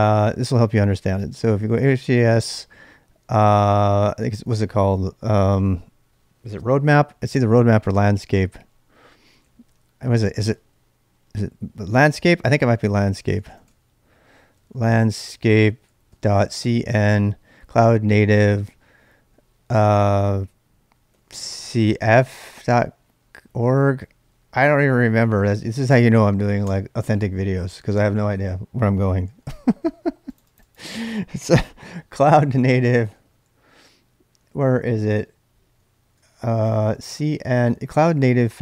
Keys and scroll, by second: 0.0-2.5 typing, 9.0-17.0 typing, 21.0-25.9 typing, 26.6 Return, 29.0-29.8 typing, 31.5-33.6 typing, 35.8-37.6 typing.